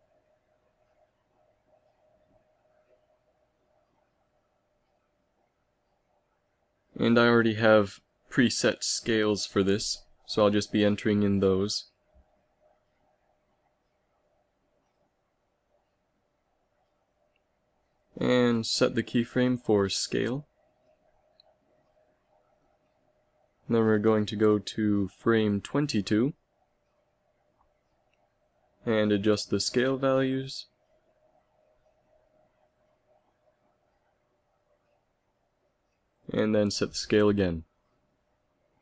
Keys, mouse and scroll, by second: 20.5 i, 25.3-26.1 Right, 26.5 Right, 26.8 Right, 33.8 ctrl+c, 34.3 ctrl+v, 34.9 ctrl+v, 36.1 i.